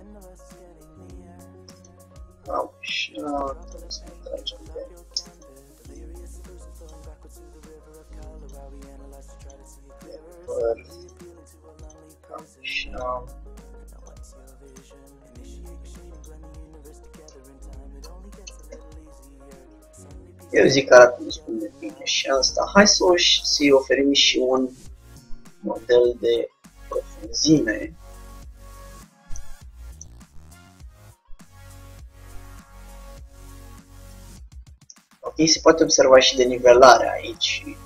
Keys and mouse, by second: 6.1-8.6 drag, 6.1 g, 9.5-13.0 drag, 11.3 g, 13.1-14.6 drag, 13.2 g, 15.2 g, 17.4 Tab, 18.3 Tab, 18.6 Tab, 18.8 z, 23.4 Tab, 24.6-29.3 drag, 31.0-34.5 drag, 34.5 Tab, 35.0 middle click, 35.7-37.4 middle drag.